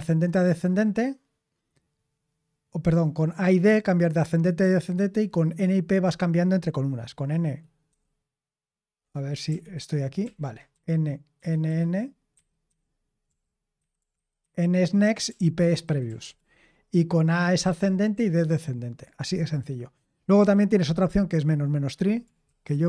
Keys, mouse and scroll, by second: 7.8 n, 9.4 super+l, 9.7 super+h, 10.1 super+l, 10.6-18.1 typing.